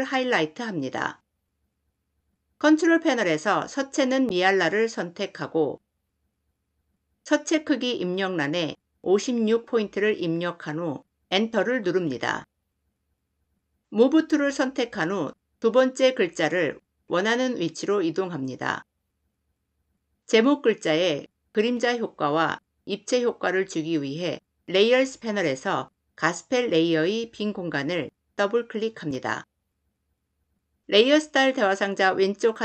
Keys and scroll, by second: 11.0 Return, 13.9 v.